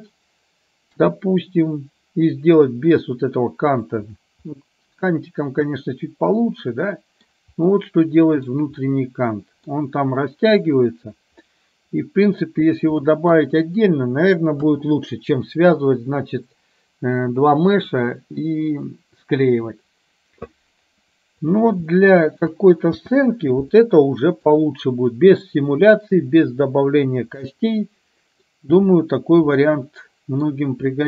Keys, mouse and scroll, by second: 0.9 KP_3, 4.6-7.3 middle drag, 7.8-8.4 middle drag, 8.9-9.7 middle drag, 11.6-12.4 middle drag, 13.1 middle drag, 14.7 KP_1, 21.9-22.4 shift+middle drag, 23.1 space, 23.8-24.7 middle drag, 27.6-28.6 middle drag, 29.8-30.6 middle drag.